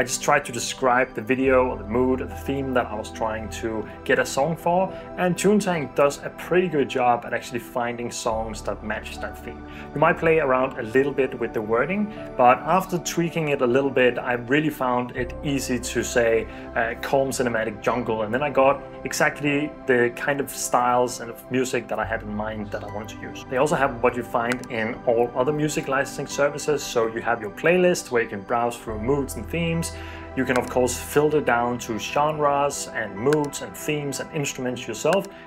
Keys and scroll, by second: 0.0-1.7 typing, 15.2-18.2 typing.